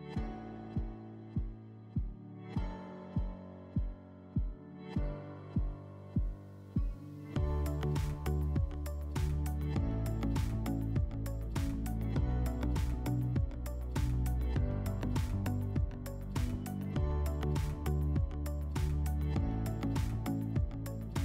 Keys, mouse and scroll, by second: 0.0 click, 0.6-1.5 scroll down 2, 1.5-2.2 scroll down 1, 3.2-4.7 drag, 6.4 click, 7.9-9.5 drag, 10.6-11.8 drag, 12.8 click, 14.7 click, 16.0 click, 17.5 click, 19.1 click, 19.7 click.